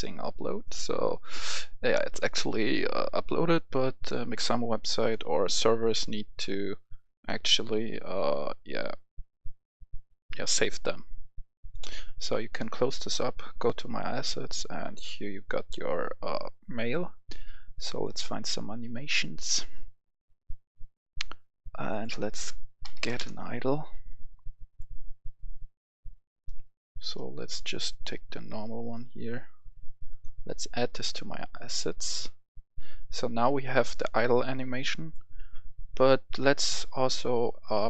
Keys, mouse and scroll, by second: 5.7 click, 22.7-23.1 typing, 23.2 Return, 24.5 click, 29.3-37.8 drag.